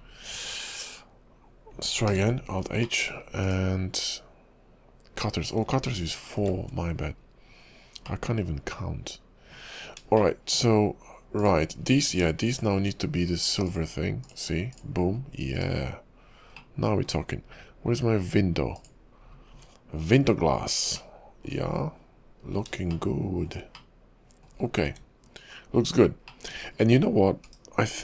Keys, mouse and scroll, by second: 0.1-1.1 scroll down 2, 2.1 alt+h, 3.0 middle click, 3.5 click, 6.4 shift+4, 7.0-7.6 scroll up 6, 8.2 middle click, 10.0-10.3 scroll up 2, 10.3 shift+middle click, 11.4 click, 12.0 scroll down 5, 12.6 shift+click, 13.6 click, 14.7 click, 15.0 shift+click, 15.3 scroll down 4, 15.5 /, 16.7 middle click, 18.8 click, 19.3-20.2 scroll up 4, 20.2 KP_5, 21.1 middle click, 21.9 KP_5, 22.6-23.1 scroll up 3, 23.1 shift+middle click, 23.9 middle click, 24.8-25.3 scroll down 4, 25.3 KP_5, 26.0-26.4 scroll down 2, 26.4 middle click, 26.8-27.3 scroll up 6, 27.4 /.